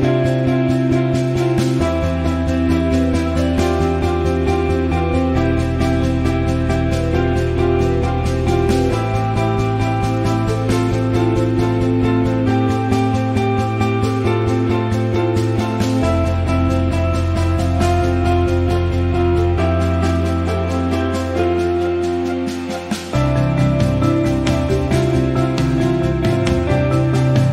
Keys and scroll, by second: 12.3 t.